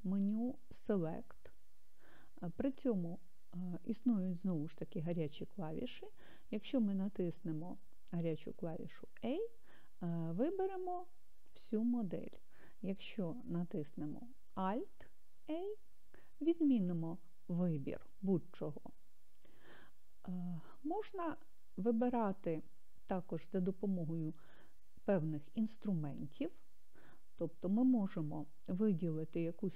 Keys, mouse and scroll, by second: 0.6 click, 3.7-8.0 drag, 15.9 alt+a, 20.1 click, 24.1-28.9 drag.